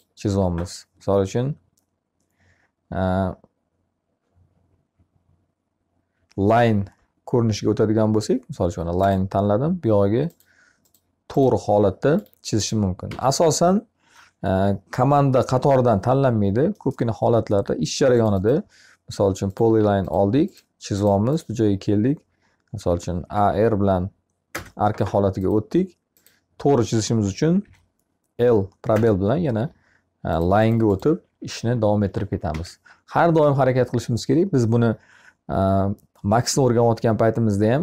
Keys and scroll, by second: 12.5 Escape, 22.3 a, 27.0 l, 31.9 Escape.